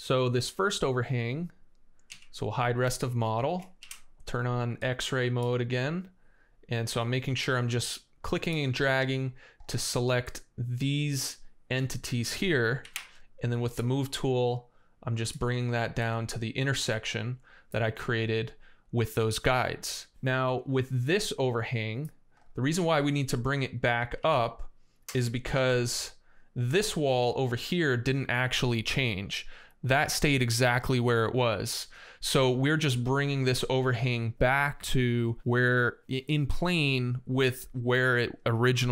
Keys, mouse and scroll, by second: 1.2 right click, 1.9 x, 2.6 space, 3.6 shift+d, 12.6 m, 15.1 click, 19.8-20.2 scroll down 1, 19.9-21.4 middle drag, 24.0 x, 25.3 shift+d.